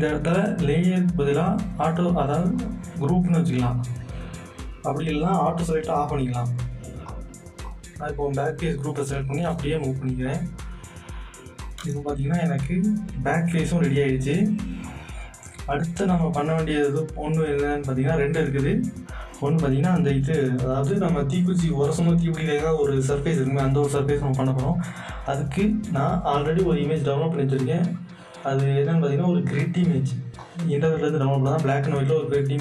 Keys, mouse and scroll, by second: 2.5 click, 7.1-14.4 drag, 14.8 click, 15.9-16.4 alt+scroll up 3, 17.4 scroll down 2, 18.2 scroll down 1, 18.9 scroll up 1, 27.9 click, 30.4-32.6 drag.